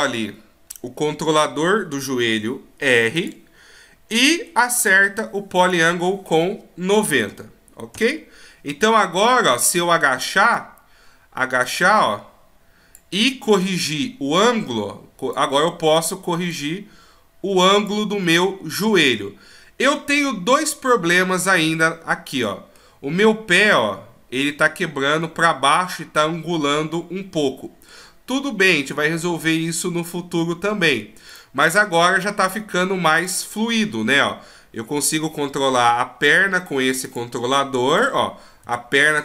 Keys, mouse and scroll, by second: 4.1 middle click, 5.9 click, 9.5 middle click, 10.5 right click, 11.6 click, 13.6 right click, 14.4 click, 15.9 right click, 16.5 click, 18.3 middle click, 21.7 middle click, 26.2 middle click, 28.3 middle click, 31.3 right click, 31.7 middle click, 33.2 right click, 34.0 g, 37.9 right click, 38.6 g.